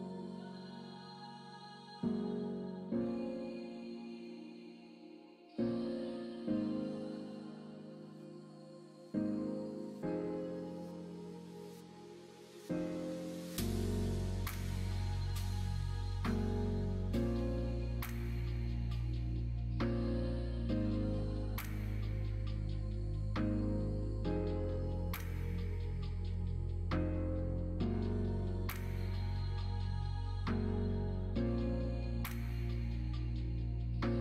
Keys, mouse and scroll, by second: 0.3 middle click, 0.3 scroll down 1, 1.1 click, 1.5 3, 2.5 2, 2.6 click, 3.8 shift+click, 4.1 middle click, 5.2 shift+click, 5.4 middle click, 6.7 shift+click, 7.1 middle click, 7.9 ctrl+b, 13.1 middle click, 13.9 3, 14.4 click, 15.3 ctrl+click, 16.2 shift+click, 16.6 shift+click, 18.2 i, 19.6 middle click, 21.0 alt+z, 22.1 shift+middle click, 23.2 middle click, 25.4 shift+click, 25.9 shift+click, 27.1 shift+click, 28.5 shift+r, 29.2 click, 29.8 middle click, 30.1 alt+z, 30.4 middle click, 31.2 middle click, 32.3 middle click, 33.4 middle click.